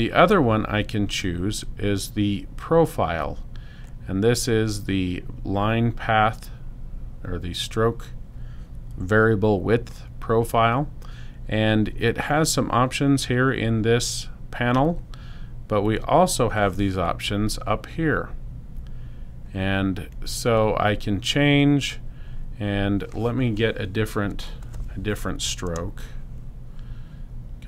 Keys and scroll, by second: 25.5 space.